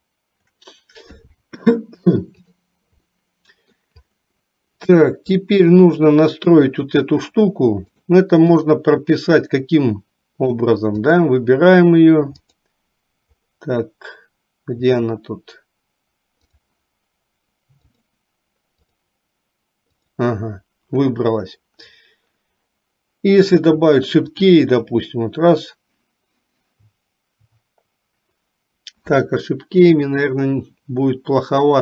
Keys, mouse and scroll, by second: 3.3 middle click, 5.2 shift+middle click, 6.7 click, 8.0 click, 9.6-10.7 middle drag, 11.2 click, 17.9 click, 19.1 click, 20.2 click, 24.4 click.